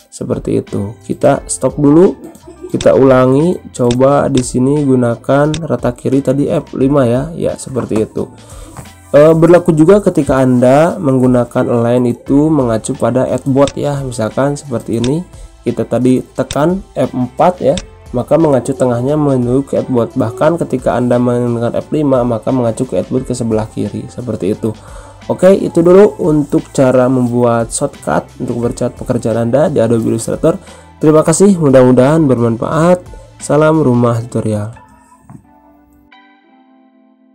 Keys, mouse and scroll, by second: 2.8 click, 8.5 F5, 13.6 click, 19.3 F4, 24.1 F5, 36.1 ctrl+End.